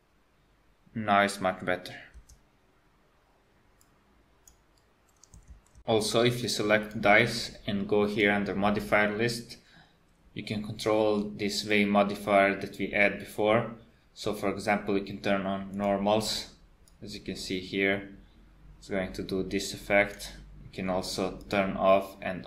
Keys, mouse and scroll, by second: 2.2 space, 3.9 click, 6.9 click, 8.3 click, 15.7 click, 17.0 click, 21.5 click.